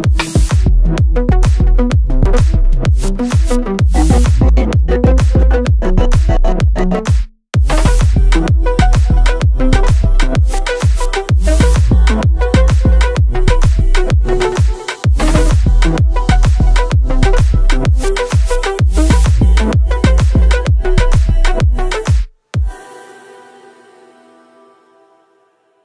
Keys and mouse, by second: 1.7-2.8 drag, 3.6 KP_3, 4.6 shift+z, 5.8 g, 6.1 y, 8.2 click, 12.0 z, 14.1 y, 18.0 click, 22.5 KP_1, 23.1-24.3 middle drag.